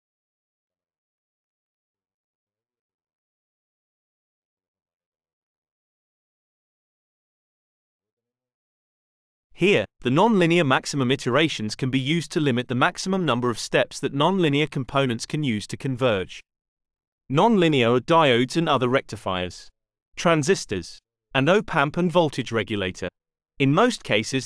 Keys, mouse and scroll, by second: 2.1 click, 5.3 click, 17.5 click, 19.5 click, 20.6-22.2 drag, 22.5 click.